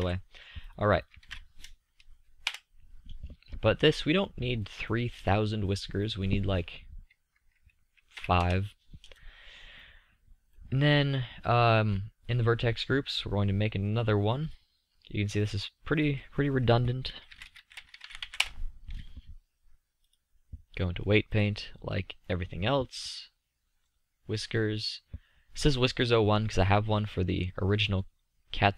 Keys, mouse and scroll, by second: 7.0-8.7 drag, 10.7-15.3 middle drag, 15.3-18.8 drag, 24.0-25.6 drag, 25.6 middle click, 26.5 click, 28.1 drag.